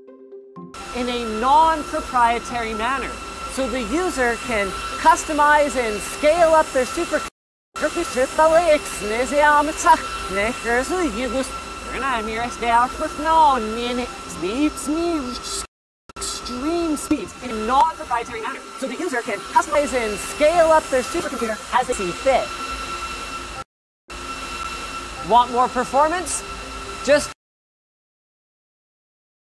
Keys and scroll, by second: 4.8 space, 7.1 a, 8.4 s, 10.0-22.5 typing, 23.5 a, 24.5 d, 27.2 space.